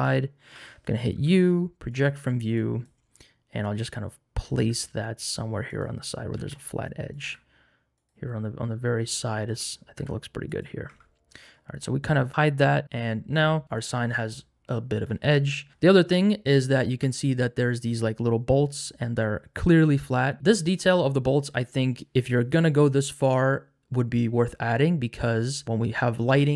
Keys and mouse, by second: 1.1 u, 2.5 click, 5.7 click, 5.7 g, 6.3 s, 7.1 click, 7.2 g, 9.9 g, 10.9 Tab, 15.3 middle click, 17.0 shift+middle click, 22.0 shift+middle click, 25.6-26.5 drag.